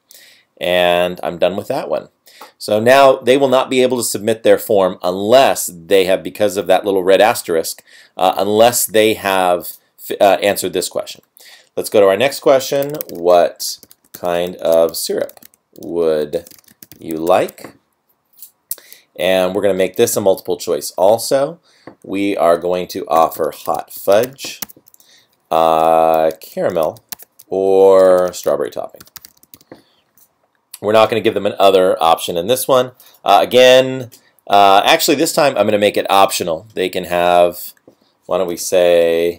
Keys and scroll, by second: 13.2 space, 14.0 space, 14.3 space, 15.3 space, 16.4 space, 16.7 space, 23.6 space, 24.6 Tab, 27.2 Tab, 38.6-39.3 typing.